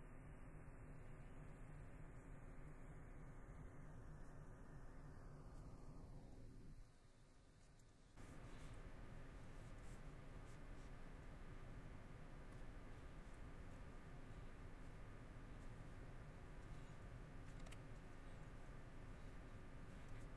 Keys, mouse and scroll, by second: 1.0 middle click, 1.6 middle click, 2.8 middle click, 4.2 middle click, 5.6 middle click, 6.8 middle click, 7.8 scroll, 7.9 middle click, 8.7 middle click, 13.3 middle click, 14.2 middle click, 15.8 middle click, 16.8 middle click, 17.5 middle click, 18.1 middle click.